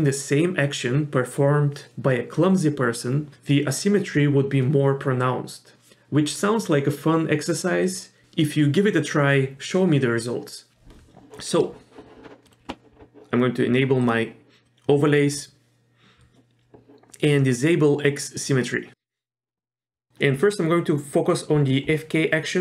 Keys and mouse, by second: 12.5 middle click, 14.7 middle click, 18.5 click, 20.0 middle click, 20.6 middle click, 22.5 middle click.